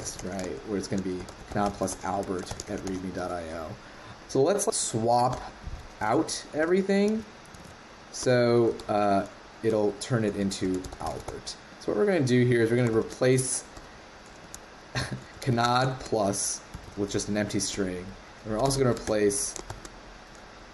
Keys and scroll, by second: 6.0 super+z, 7.5 super+z, 8.7 super+/.